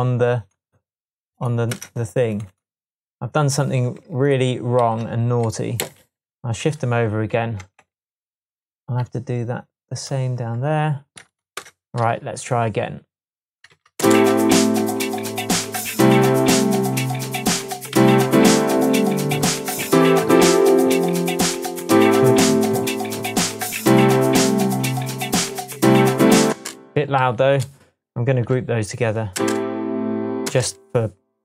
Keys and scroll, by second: 1.7 BackSpace, 4.8 super+a, 5.8 Left, 7.6 shift+Tab, 11.5 alt+BackSpace, 12.6 BackSpace, 13.7 super+d, 17.9 super+d, 28.1 shift+super+g, 28.6 super+g, 29.3 space, 30.4 space.